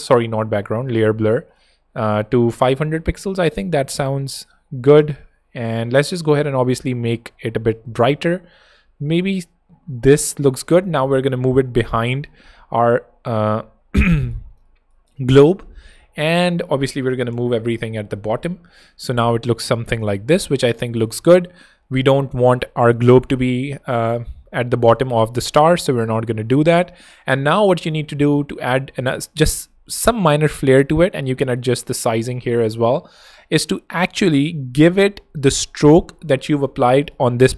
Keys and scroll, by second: 2.9 Escape, 5.6 Escape, 10.5 Escape, 11.3 super+[, 14.6 super+space, 15.5 space, 17.8 alt+shift+super+|, 18.4 alt+super+[, 22.3 super+], 23.1 alt+super+], 23.2 alt+super+h, 24.0 alt+h, 31.7 alt+shift+space, 32.4 space.